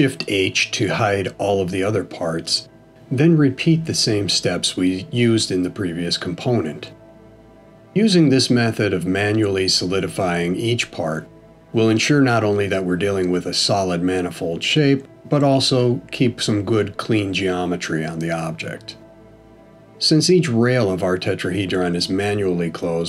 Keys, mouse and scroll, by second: 0.2 shift+h, 1.8 middle click, 3.9 click, 4.8 shift+click, 6.4 f, 7.1 click, 7.8 shift+click, 8.7 f, 9.5 click, 10.0 shift+click, 10.9 f, 11.4 middle click, 13.5 click, 14.2 shift+click, 15.1 f, 15.3 middle click, 16.5 click, 17.1 shift+click, 18.0 f, 18.3 middle click, 20.4 click, 20.9 shift+click, 21.8 f, 22.2 middle click.